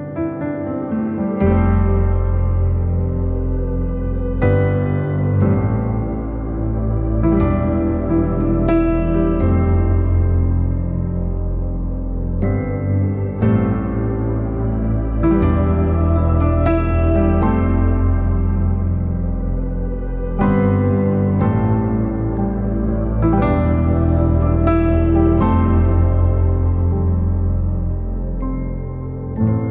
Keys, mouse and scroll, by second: 0.7 ctrl+l, 0.9 click, 1.3 middle click, 2.6 click, 3.5-6.0 shift+middle drag, 6.0-7.2 drag, 7.2 ctrl+z, 7.7 scroll down 1, 8.4-20.6 drag, 20.6 ctrl+z, 21.8 ctrl+z, 22.4 scroll down 2, 22.8-24.0 middle drag, 24.0 click, 24.3 scroll down 2, 24.5 middle click, 24.7 scroll up 2, 25.1 middle click, 25.9 click, 26.6 alt+middle click, 27.1 shift+d, 27.7-28.0 scroll down 2, 28.0-29.7 shift+middle drag.